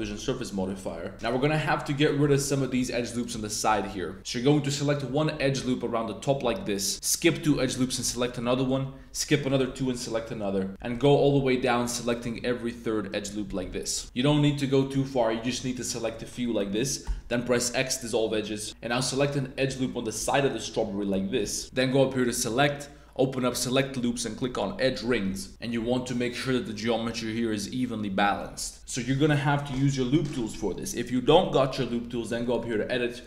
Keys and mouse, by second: 0.2 Tab, 0.6 middle click, 1.1 alt+Tab, 1.2 alt+click, 1.9 alt+shift+click, 2.4 alt+shift+click, 3.0 alt+shift+click, 3.7 super+z, 7.8 alt+shift+click, 8.4 middle click, 9.4 alt+shift+click, 10.0 middle click, 10.9 alt+shift+click, 13.0 alt+shift+click, 13.5 super+z, 13.8 alt+shift+click, 14.4 click, 14.4 z, 17.0 x, 18.4-18.7 middle drag, 18.7 2, 18.9 right click, 20.0 click, 20.2-20.6 middle drag, 21.1 shift+,, 21.3 shift+click, 21.6 super+z, 22.2-25.0 drag, 28.2 middle click, 32.4-33.2 drag.